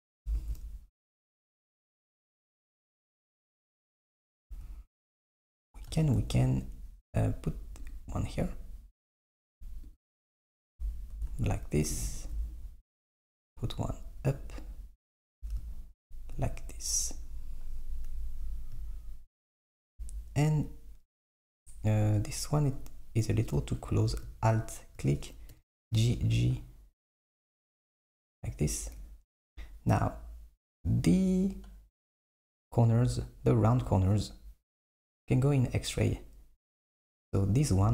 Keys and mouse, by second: 0.4 r, 3.2 click, 4.3 z, 6.2 r, 10.7 Tab, 11.2 Tab, 12.2 r, 15.5 Tab, 18.8 middle click, 20.0 Tab, 22.3 click, 23.8 alt+click, 25.6 g, 29.5 Tab, 30.2 KP_1, 35.5 click, 37.8 Tab.